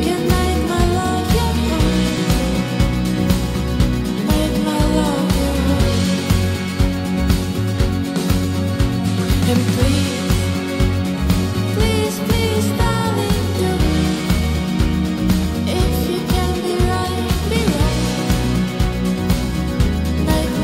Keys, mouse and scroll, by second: 0.0-0.9 typing, 1.3-8.4 drag, 8.8-12.2 drag, 13.8 click, 14.4-17.7 drag, 18.0-20.6 drag.